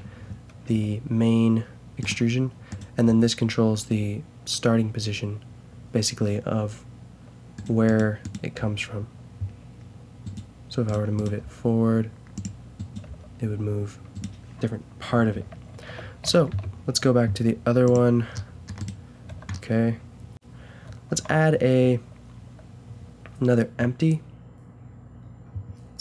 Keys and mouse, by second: 0.7 g, 3.0 g, 8.5 g, 11.4 g, 13.0 g, 15.7 ctrl+z, 16.3 ctrl+z, 18.4 middle drag, 18.8-19.8 drag, 18.8-19.8 right drag, 19.3 a, 21.1 shift+a.